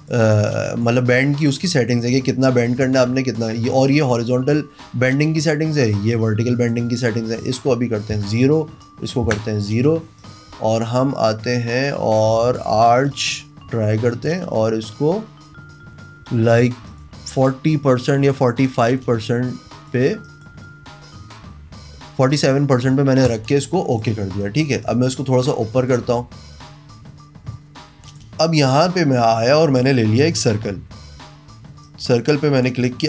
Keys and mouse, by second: 0.5 click, 1.1 click, 2.0 click, 2.9 click, 3.9 click, 4.6 click, 5.9-6.7 drag, 7.4 click, 8.2 KP_0, 8.9 click, 9.3 KP_0, 10.2 click, 13.1 click, 14.2 click, 16.9 drag, 17.3 click, 19.8 click, 20.3 click, 23.3 click, 24.0 click, 24.5 click, 25.8 click, 28.1 click, 31.9 click.